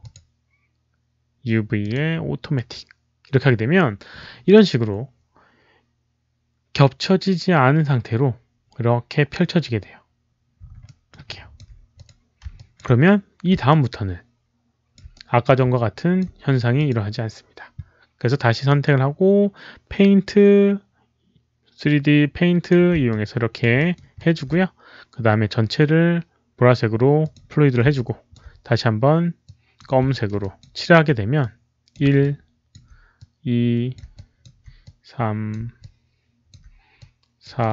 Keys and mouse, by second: 1.7 click, 1.7 right click, 2.4 click, 7.6 click, 7.6 right click, 10.7 alt+middle click, 11.2 alt+click, 11.9 click, 12.0 alt+middle click, 12.4 alt+click, 13.6-14.8 alt+drag, 14.8 alt+middle click, 15.0 right click, 15.7 alt+click, 15.7 alt+middle click, 16.1 right click, 16.1 alt+middle click, 16.7 alt+click, 17.4 alt+click, 17.4 right click, 18.6-22.6 right drag, 22.1 alt+click, 23.1 alt+click, 23.5 right click, 23.7 alt+middle click, 24.1 alt+click, 26.5 alt+click, 26.5 alt+middle click, 26.5 right click, 27.1 alt+click, 27.8 alt+click, 29.3 click, 29.3 right click, 30.0 alt+middle click, 30.3 alt+click, 30.6 alt+right click, 31.3 alt+click, 31.3 alt+middle click, 31.8 alt+right click, 31.8 alt+middle click, 32.2 alt+click, 32.2 alt+right click, 32.2 alt+middle click, 33.1 alt+click, 33.8 alt+right click, 33.8 alt+middle click, 34.1 alt+click, 34.7 alt+click, 35.4 alt+right click, 35.8 alt+click, 36.4 alt+right click, 36.9 alt+click, 37.5 click.